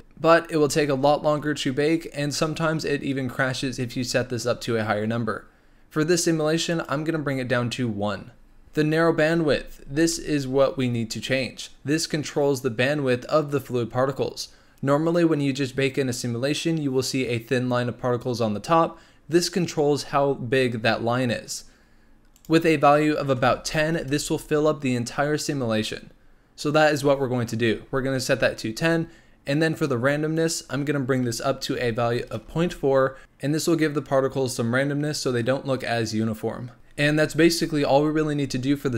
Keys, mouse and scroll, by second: 6.7 click, 8.6 click, 22.3-25.3 drag, 30.3-33.2 drag.